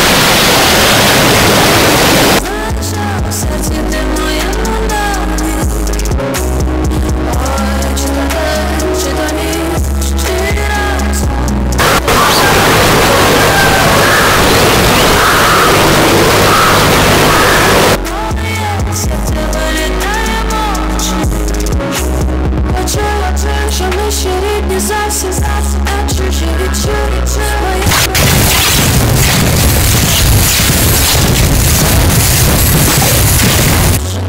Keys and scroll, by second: 2.4 Page_Down.